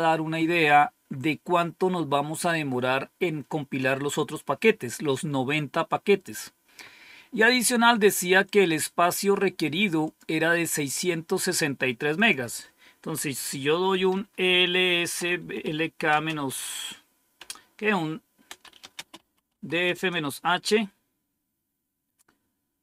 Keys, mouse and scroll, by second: 8.4-9.8 drag, 10.0 click, 10.8 click, 12.1 click, 13.6-16.3 typing, 17.3-19.9 typing.